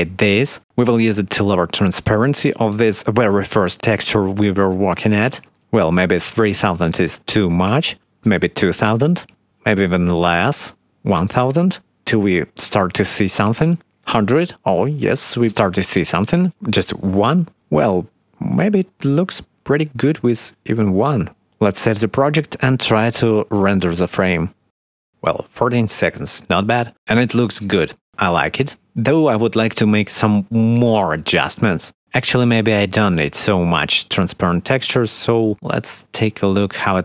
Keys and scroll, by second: 8.5 2, 8.6 0, 8.8 Return, 10.6 1, 10.8 0, 11.6 Return, 12.6 1, 12.7 0, 12.9 Return, 14.3 5, 14.4 Return, 15.5 2, 15.6 Return, 16.7 1, 16.7 Return, 18.5 space, 20.4 space, 21.5 ctrl+s, 24.1 ctrl+F12.